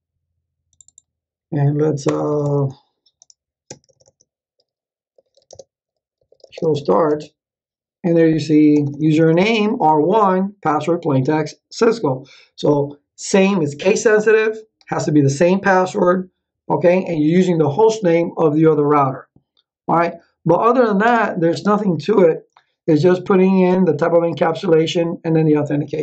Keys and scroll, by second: 2.0 Return, 4.9-7.5 typing, 8.7 Return, 21.0 space.